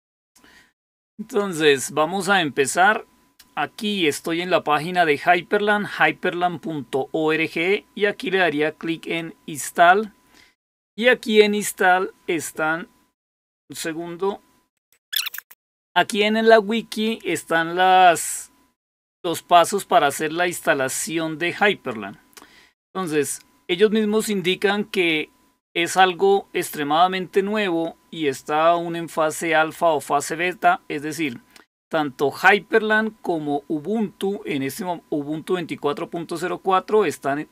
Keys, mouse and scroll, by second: 1.6 click, 8.9 click, 14.8 click, 15.2 click, 22.2-22.7 scroll down 2, 22.7-23.5 scroll down 1, 23.5-28.1 scroll down 1, 28.1-36.0 scroll down 1, 36.0-37.5 scroll down 1.